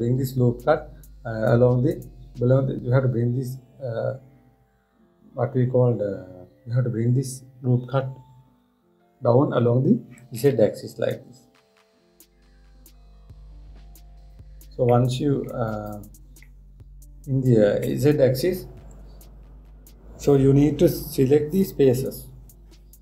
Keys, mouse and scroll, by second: 15.6 middle click, 16.4 click, 17.1-20.2 middle drag.